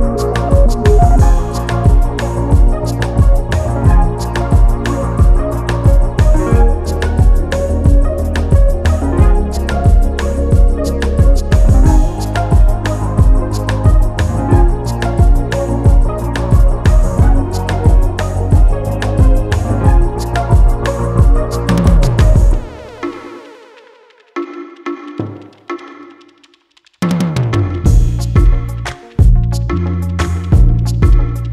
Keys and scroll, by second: 1.8 Return.